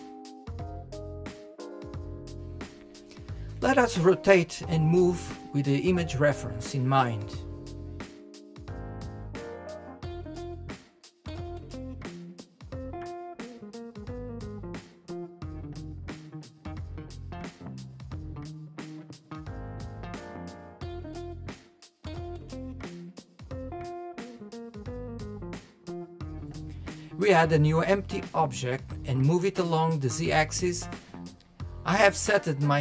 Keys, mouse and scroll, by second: 0.4 click, 1.2-2.4 shift+middle drag, 2.4 scroll down 2, 3.2-3.6 shift+middle drag, 3.6-3.9 scroll up 1, 3.9-5.4 shift+middle drag, 5.5-7.7 middle drag, 7.7-9.0 drag, 10.0 click, 11.7 click, 12.9 click, 14.7 click, 16.8 KP_1, 19.7 click, 21.3 click, 22.1 KP_1, 22.5-24.1 scroll down 3, 22.8-23.1 shift+middle drag, 24.1 KP_3, 24.4 scroll down 3, 24.7-25.1 shift+middle drag, 25.1 scroll down 1, 25.3-27.9 shift+middle drag, 28.4 scroll down 2, 28.7-29.3 shift+middle drag, 29.3 Left, 30.4 scroll up 2, 30.7-31.0 shift+middle drag, 31.0 scroll up 3, 31.4-32.8 shift+middle drag.